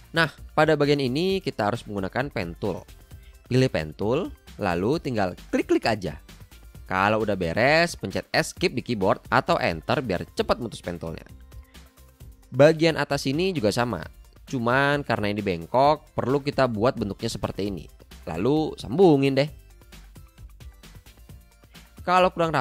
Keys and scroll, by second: 2.7 p, 8.7 a, 12.6 p.